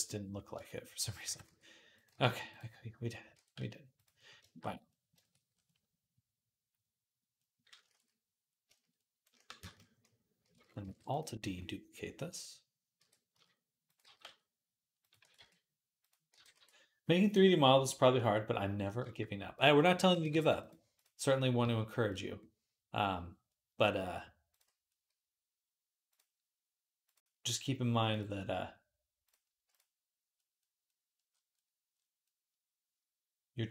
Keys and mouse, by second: 1.1 r, 1.9 g, 3.2 r, 7.8 ctrl+s, 10.6 alt+d, 12.8 r, 13.0-18.8 middle drag, 13.8 g, 15.0 r, 16.1 g, 18.8 shift+click, 19.0-24.3 middle drag, 19.9 g, 21.4 s, 24.3 click, 24.4-26.9 middle drag, 26.9-29.2 drag, 29.2-33.7 middle drag.